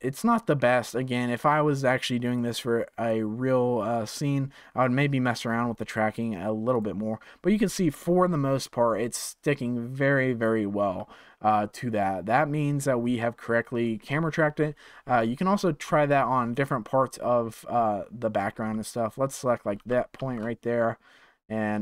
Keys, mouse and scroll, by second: 0.1-5.4 drag, 5.4-6.7 scroll up 5, 6.7-9.7 drag, 9.9 scroll down 4, 12.2-16.1 drag, 19.7 g.